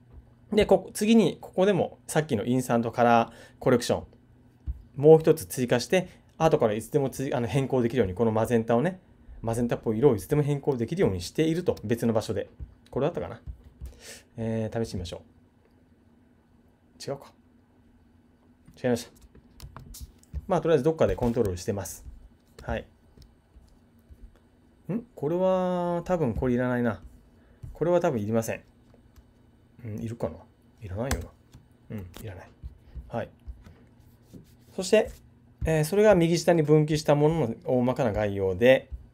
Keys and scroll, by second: 19.6 super+z.